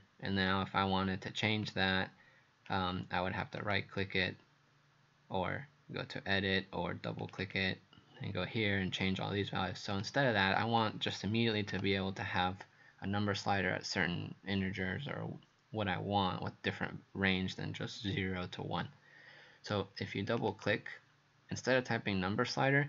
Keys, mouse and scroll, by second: 3.6 right click, 7.2 click, 7.4 click, 9.9 click, 10.6 click, 11.7 Delete, 20.3 click, 20.5 click.